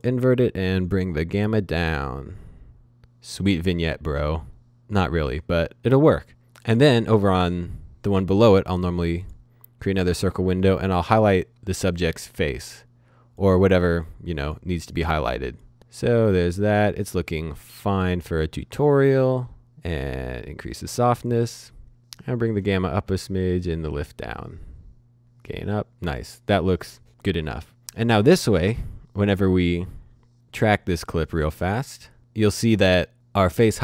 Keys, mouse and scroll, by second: 0.8 scroll, 0.8-2.7 scroll down 1, 3.2-4.5 scroll down 1, 4.5 click, 9.2 click, 22.2-23.1 scroll up 1, 23.1-23.9 scroll down 1, 23.9-24.4 scroll up 1, 24.4-25.2 scroll down 1, 25.2-26.3 scroll up 1, 28.9 click, 30.6 click, 33.1 click.